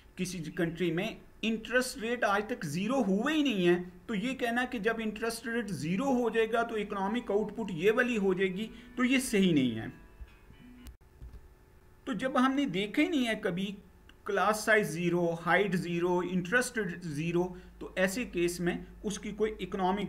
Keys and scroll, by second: 10.5 shift+F9.